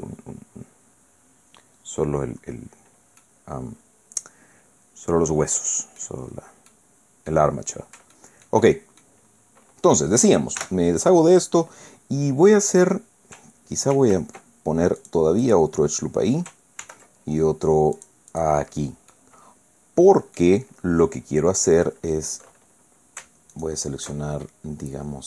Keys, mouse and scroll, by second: 2.4-2.9 scroll up 2, 3.2 scroll down 2, 3.2-6.2 drag, 6.7 click, 7.6 scroll down 1, 8.1 shift+scroll down 1, 8.2-9.2 shift+drag, 9.3 shift+scroll up 2, 10.6 a, 13.9 ctrl+r, 15.0 click, 15.4 click, 16.8 ctrl+r, 18.0 click, 18.3 click, 19.1-20.6 drag, 23.5 alt+shift+right click.